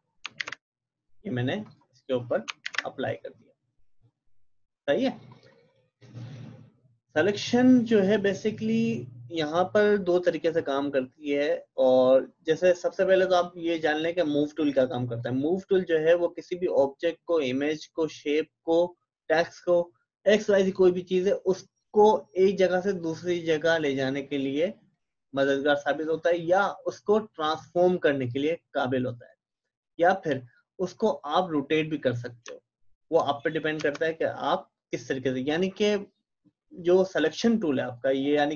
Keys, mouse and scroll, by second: 0.3 alt+Delete, 1.6 click, 2.7 alt+Delete, 5.5 click, 14.0-19.7 drag, 21.8-35.8 drag.